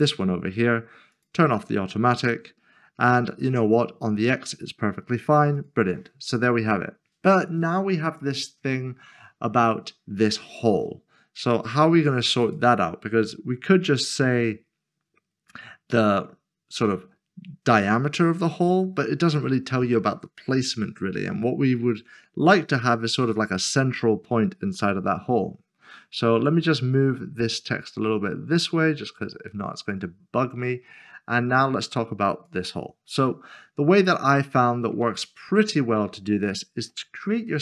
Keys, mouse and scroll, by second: 0.2 scroll down 1, 5.5 click, 12.4 click, 13.7 scroll down 1, 18.2 scroll down 1, 21.4-23.6 scroll down 1, 26.9 click, 34.0-34.5 scroll up 1, 34.5 middle click, 35.2 shift+middle click, 36.5 shift+middle click, 37.2 scroll up 1.